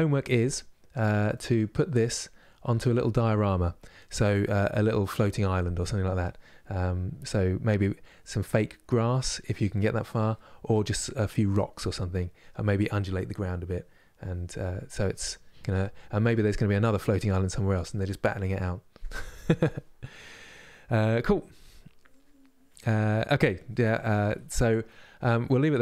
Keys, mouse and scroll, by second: 0.0-2.0 middle drag, 2.0 scroll up 2, 14.9 middle click, 15.9-25.8 scroll down 3.